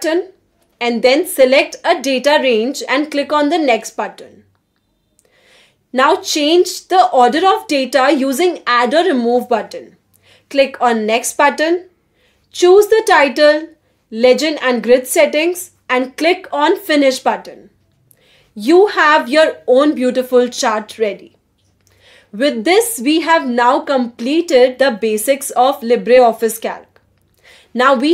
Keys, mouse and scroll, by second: 0.0 click, 1.3-4.6 typing, 5.5-6.1 scroll up 1, 6.0-8.8 typing, 10.1 middle click.